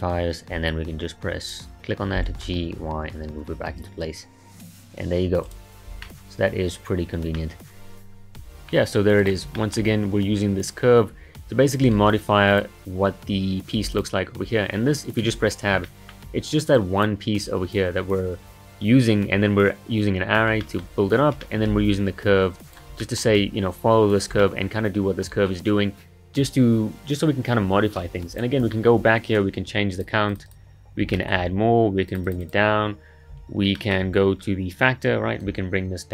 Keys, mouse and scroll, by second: 1.4 click, 2.2 g, 6.0-9.2 middle drag, 9.2 click, 9.6-11.9 shift+middle drag, 11.9 Tab, 12.5 click, 13.8 Tab, 13.9 click, 15.3 Tab, 15.8-16.8 shift+middle drag, 16.8 click, 17.4 click, 20.6-21.8 shift+middle drag, 21.8 Tab, 22.7 click, 23.0-27.4 shift+middle drag, 28.3 click, 28.7 shift+middle drag, 29.0-30.0 scroll up 1, 30.0-31.1 drag, 31.1 shift+middle click, 32.1-33.8 drag, 33.8-35.4 shift+middle drag, 35.4-36.1 drag.